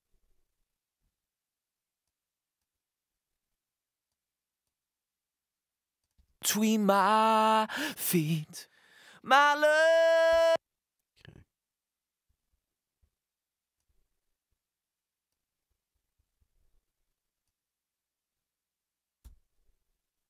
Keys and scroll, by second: 6.2 space, 10.3 space.